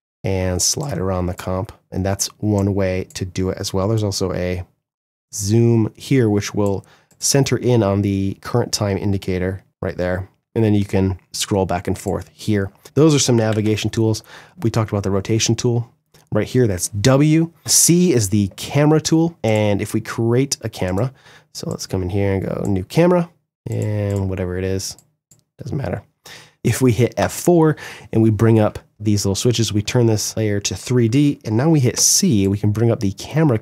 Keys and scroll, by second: 13.0 Delete, 22.2 Delete, 26.5 F4, 31.5 c.